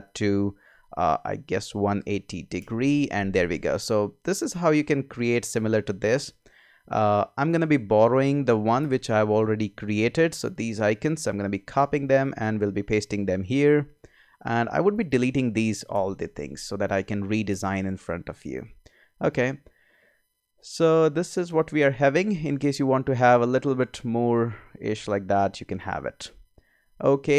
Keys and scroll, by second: 1.7-2.6 typing, 8.8 BackSpace, 11.7 super+c, 12.7 super+v, 15.9 BackSpace, 17.5 BackSpace, 25.3 super+z.